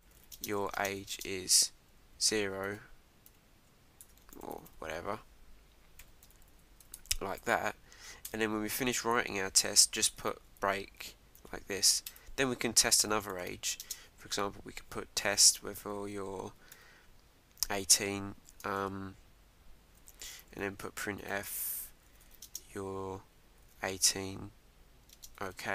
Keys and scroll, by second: 6.5 Right, 8.3 Return, 12.1 Return, 18.5 shift+;, 18.8 Return, 21.3 shift+'.